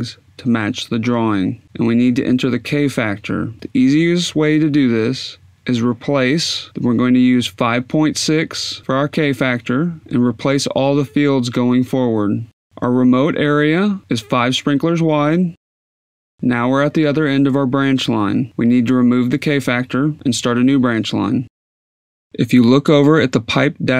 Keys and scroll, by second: 0.5-1.5 typing, 9.9-10.8 typing, 15.0-16.8 typing, 18.0-23.9 typing, 20.1 Tab, 21.5 Tab.